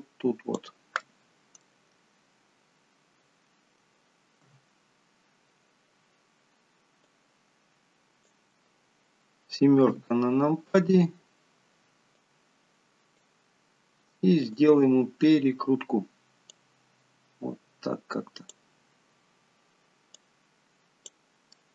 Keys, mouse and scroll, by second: 1.3 middle click, 2.1 click, 2.4 scroll up 2, 4.7 KP_1, 7.3 click, 10.1 KP_7, 11.2-12.5 scroll down 2, 12.5 click, 14.7 click, 16.8 click, 19.5 scroll down 2, 20.4 click.